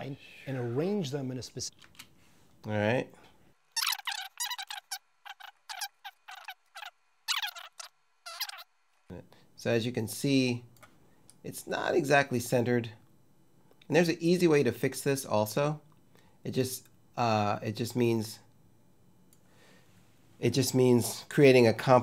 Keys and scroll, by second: 1.6 space.